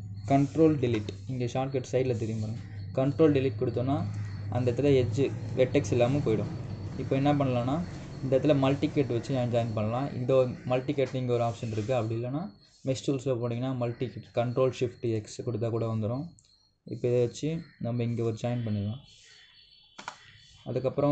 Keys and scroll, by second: 1.6 ctrl+Delete, 20.7 Return.